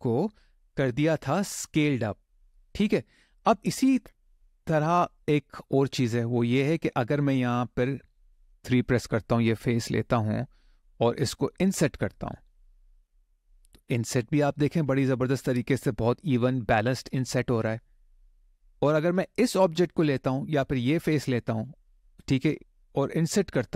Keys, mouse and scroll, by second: 9.3 click, 9.7 middle click, 12.1 i, 14.6 click, 16.8 middle click, 18.1 shift+middle click, 19.4 click, 20.4 click, 21.3 click, 23.0 i.